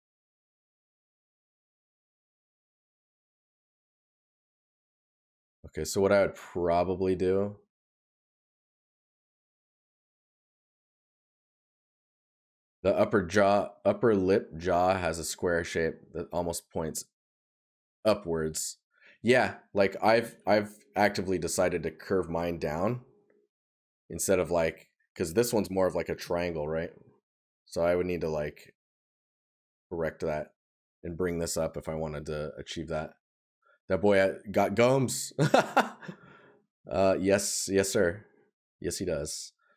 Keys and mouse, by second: 19.5 right click, 31.8 right click, 33.1 right click, 34.9 right click, 39.2 right click.